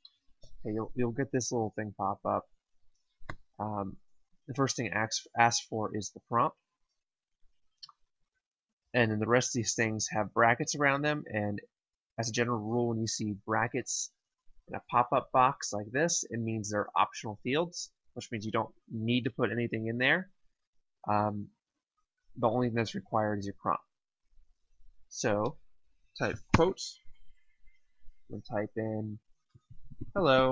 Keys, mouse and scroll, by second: 26.4 typing, 29.3-30.5 typing.